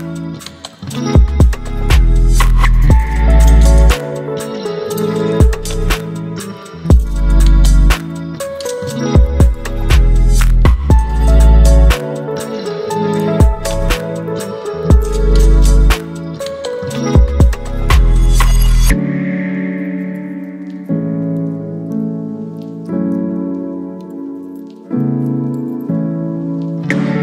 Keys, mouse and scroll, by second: 6.0 click, 6.0-7.0 alt+right drag, 11.6-12.6 drag, 13.2 Return, 15.1 click, 18.7 click, 20.0 v, 20.3 ctrl+t, 22.0-22.9 drag.